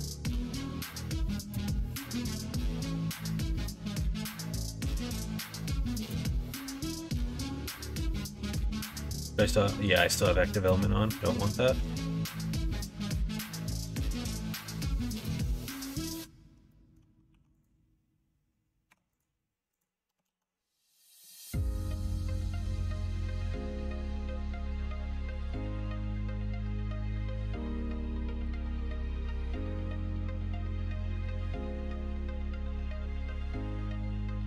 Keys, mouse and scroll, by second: 1.4 middle click, 2.1 ctrl+r, 2.8 middle click, 4.1 l, 4.5 middle click, 5.5 s, 7.6 ctrl+z, 7.9 middle click, 9.0 ., 10.1-11.3 middle drag, 11.7 s, 14.1 middle click, 15.5 middle click, 15.9 shift+middle click, 16.7 middle click, 17.3 4, 18.9 3, 19.7 click, 20.2 alt+z, 20.9 click, 21.3 shift+click, 21.6 x, 22.5 middle click, 23.0 middle click, 23.9 1, 24.6 click, 25.4 middle click, 27.4 3, 28.3 x, 30.1 middle click, 31.1 shift+click.